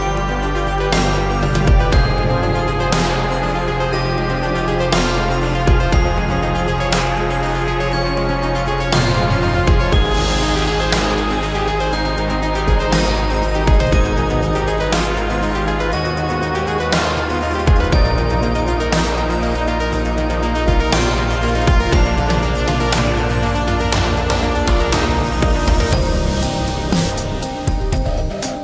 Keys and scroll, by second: 2.6 Escape, 3.0 Escape, 3.2 Escape, 3.4 Escape, 11.9 v, 13.7 Return, 15.0 space, 15.1 Escape.